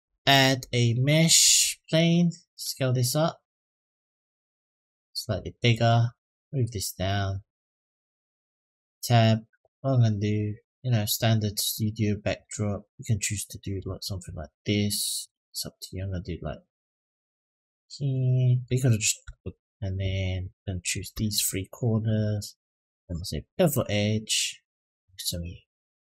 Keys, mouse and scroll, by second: 2.3 s, 5.5-7.1 drag, 7.6-8.5 scroll down 3, 8.6 Tab, 10.0 click, 10.8 click, 11.5 click, 12.7 shift+click, 15.0 e, 15.7-16.9 drag, 17.8 middle click, 18.6 shift+middle click, 20.6 click, 21.1 shift+click, 21.5 shift+click, 21.9-26.0 right drag.